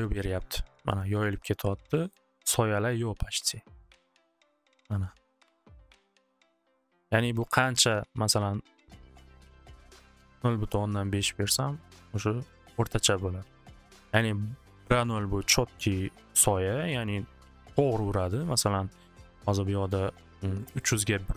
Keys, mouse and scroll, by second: 2.1 middle click, 2.8 middle click, 3.6 middle click, 4.6 middle click, 5.7 middle click, 6.5 middle click, 8.9 click, 9.0 5, 9.3 Return, 11.9 middle click, 14.6-17.1 middle drag, 20.8 click.